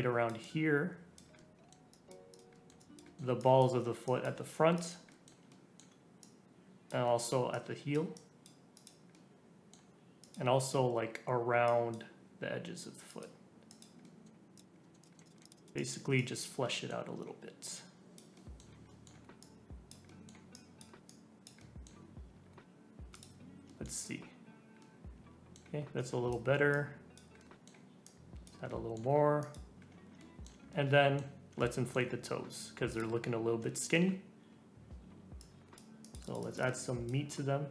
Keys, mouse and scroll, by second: 1.3 middle click, 1.9 click, 2.5 middle click, 2.8 click, 3.0 middle click, 3.4-5.1 drag, 5.1-6.2 middle drag, 6.2 click, 7.0 middle click, 7.5-9.1 drag, 9.1-10.2 middle drag, 10.2-14.0 drag, 14.0 middle click, 14.3 scroll down 1, 14.5 click, 14.7 scroll up 3, 14.8 middle click, 15.0 click, 15.1 middle click, 15.2 click, 15.3 middle click, 15.4-16.6 drag, 16.6-17.7 middle drag, 17.7 click, 18.3-19.4 middle drag, 19.4 click, 20.0 middle click, 20.1 click, 20.5-21.6 drag, 21.6-23.1 middle drag, 23.1 click, 23.6 shift+middle click, 23.9 scroll down 4, 24.8-25.9 middle drag, 25.9-27.4 drag, 27.4 middle click, 28.0 click, 28.7 middle click, 29.4 click, 29.8-30.2 scroll up 2, 30.2 shift+middle click, 30.7 scroll up 1, 30.9 middle click, 31.8 middle click, 31.9 middle click, 32.9 click, 33.4-33.7 scroll up 2, 33.7 shift+middle click, 34.4-35.1 scroll up 2, 35.4-37.7 drag.